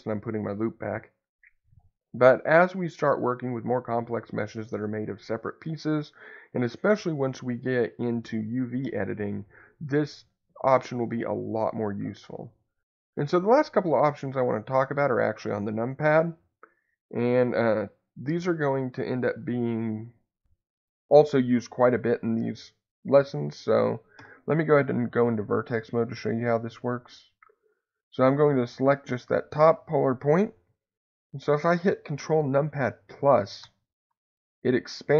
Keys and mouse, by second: 0.0 ctrl+z, 1.6 click, 4.5 click, 17.1 click, 20.3 click, 33.1-35.1 ctrl+KP_Add.